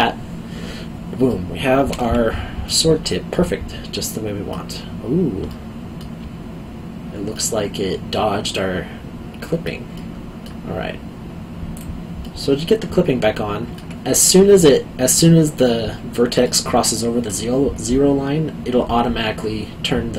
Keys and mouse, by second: 1.2 middle click, 3.3 middle click, 5.5 alt+middle click, 9.9 middle click, 11.7 click, 12.2 middle click, 14.6 middle click.